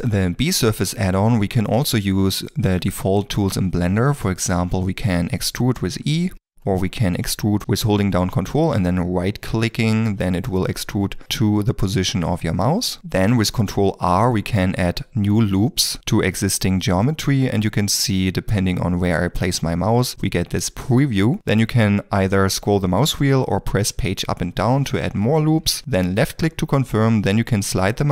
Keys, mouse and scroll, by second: 1.6 shift+middle click, 5.4 e, 6.2 r, 6.7 shift+middle click, 8.9 ctrl+r, 9.8 ctrl+r, 10.5 ctrl+right click, 13.0 middle click, 13.4 ctrl+middle click, 23.5 Page_Up, 24.3 Page_Down, 24.8 Page_Up, 25.3 Page_Down.